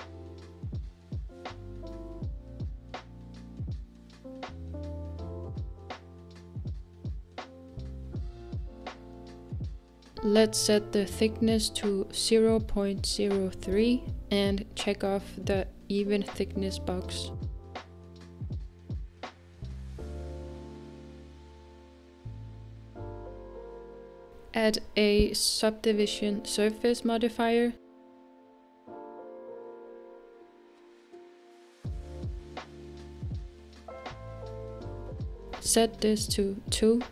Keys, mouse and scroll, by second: 7.1-7.7 scroll up 1, 7.7 scroll up 1, 7.8 middle click, 8.7-11.3 scroll up 1, 11.3-15.8 drag, 16.6-22.6 middle drag, 28.6-31.4 drag.